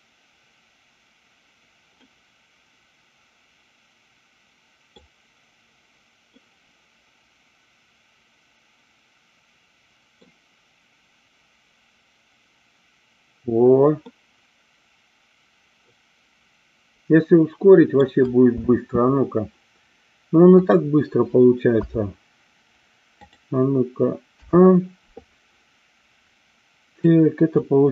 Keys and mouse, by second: 2.0-5.1 middle drag, 6.3-10.3 middle drag, 14.1-18.1 middle drag, 18.8 space, 20.6 click, 21.8 a, 23.3 click, 24.5 a, 27.0 click.